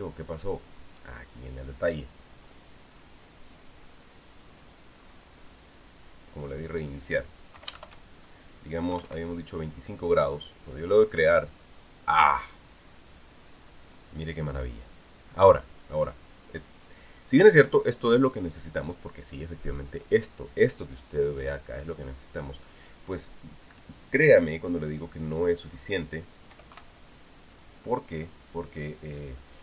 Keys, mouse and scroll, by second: 2.6 click, 5.8-6.1 scroll up 1, 7.5 click, 8.4 Home, 8.5 shift+End, 9.7 KP_2, 9.8 KP_5, 12.1 click, 13.9-15.1 drag, 26.2 click, 27.3 KP_7, 27.5 KP_5.